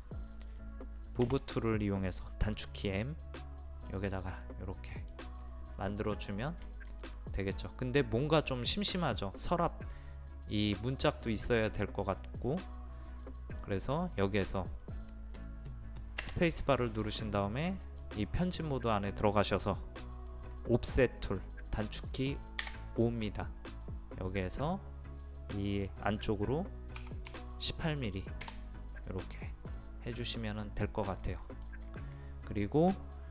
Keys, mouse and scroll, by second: 1.2 m, 2.6-3.7 drag, 4.4 middle click, 5.4-6.7 scroll up 1, 6.7 shift+middle click, 13.0 scroll up 1, 13.3 middle click, 16.7 space, 17.6 click, 22.6 o, 24.3 click, 27.0 KP_1, 27.3 KP_8, 29.7-31.7 middle drag.